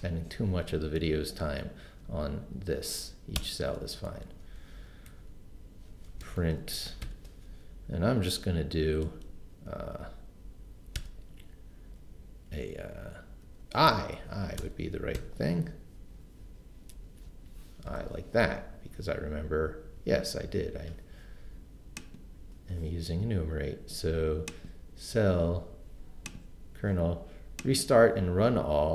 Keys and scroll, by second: 3.4 Return, 5.1-7.5 typing, 11.0 ', 13.9 Right, 14.6 BackSpace, 15.2 i, 17.3 Left, 17.9 BackSpace.